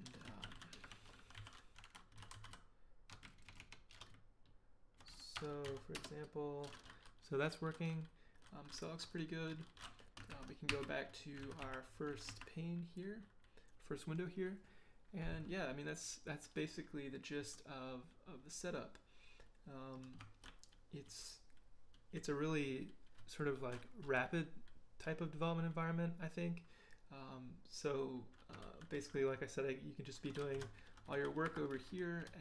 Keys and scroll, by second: 0.0-3.9 typing, 3.0 Left, 3.2 Right, 3.4 Right, 4.1 Left, 4.6 Left, 5.3-6.1 typing, 10.3 ctrl+b, 10.7 ctrl+n, 11.4 ctrl+b, 11.6 ctrl+n, 12.1 ctrl+b, 12.3 ctrl+n, 20.2 ctrl+h, 20.4 ctrl+l, 21.0 ctrl+k, 21.9 ctrl+h, 28.6 ctrl+h, 29.0 ctrl+j, 29.5-32.3 typing.